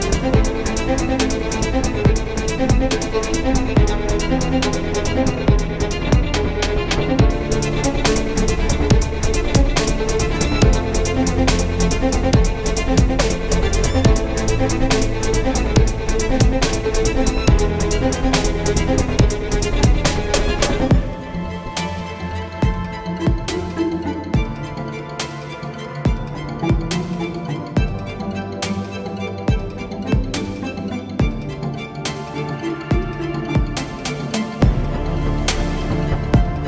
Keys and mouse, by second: 5.4-23.9 drag, 25.0-28.1 drag, 25.8 s, 30.9-36.2 drag.